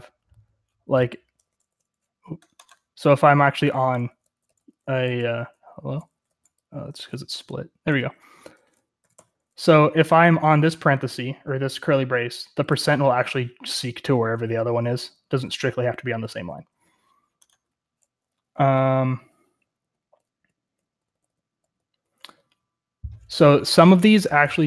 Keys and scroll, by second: 1.3 j, 1.6 j, 3.1-6.2 typing, 7.5 ctrl+-, 8.2-10.2 typing, 9.1 Escape, 12.6 typing, 13.7-16.3 typing, 18.2-21.3 typing, 23.4-24.1 typing.